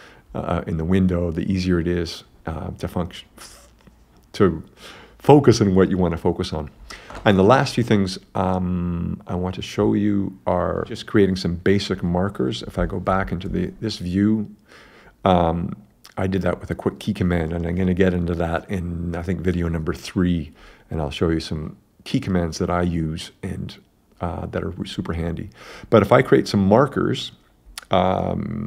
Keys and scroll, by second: 13.1 super+g.